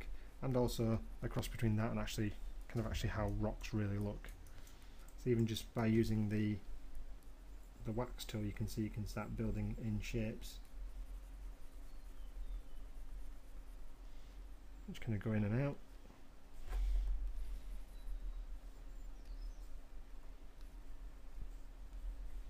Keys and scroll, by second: 21.0 m, 22.1 [.